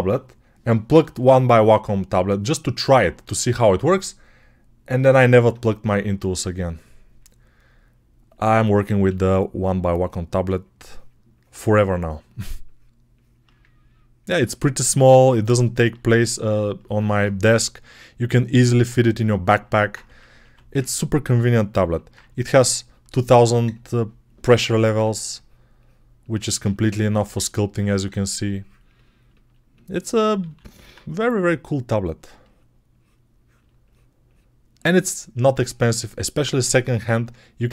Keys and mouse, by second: 8.9 x, 16.0-22.1 alt+shift+drag, 17.3 g, 20.3 1, 22.1-26.4 shift+right drag, 24.4 alt+q, 24.9 1, 29.3-33.3 ctrl+alt+right drag, 30.2 alt+q, 33.3-37.7 ctrl+drag.